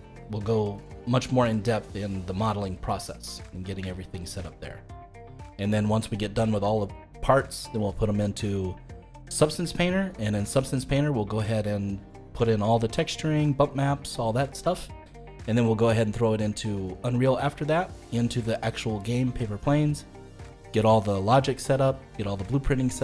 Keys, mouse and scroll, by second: 3.4-3.9 scroll down 2, 3.9-7.3 shift+middle drag.